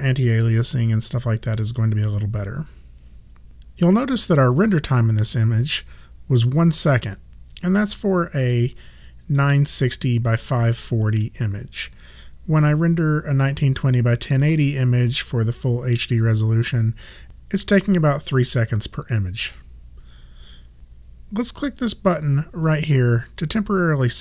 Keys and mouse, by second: 8.5 click.